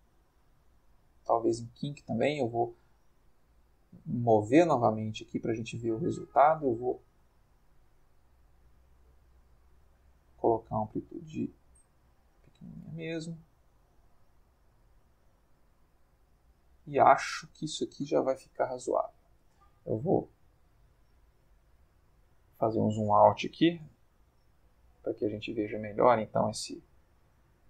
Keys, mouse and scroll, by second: 1.1 click, 1.6 click, 2.8-13.0 drag, 14.6-18.2 drag, 17.7 Escape, 19.4 click, 20.2 ctrl+middle click, 20.6 ctrl+middle click, 22.4 click, 23.4 g, 23.7 z, 25.6 click, 25.7 g.